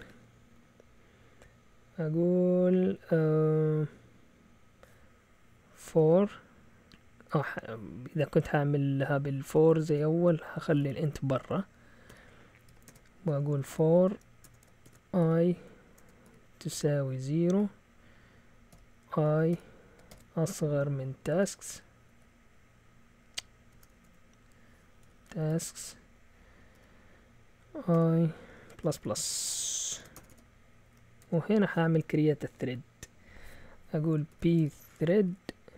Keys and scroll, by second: 5.6-6.5 typing, 9.5-17.4 typing, 18.7-20.1 typing, 21.8-22.5 typing, 23.7-26.7 typing, 27.9-31.7 typing, 30.8 Up, 34.1-35.7 typing.